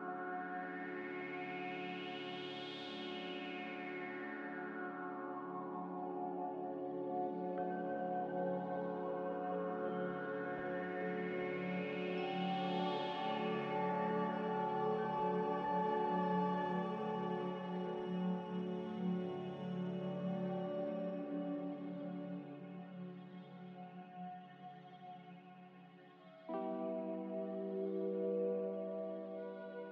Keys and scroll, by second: 1.5 F9, 10.4 ctrl+z, 11.9-13.7 typing, 15.1 Tab, 15.7-17.4 typing, 16.6 Return, 22.4 z, 25.7 a, 26.5 z, 28.5 a, 29.8 z.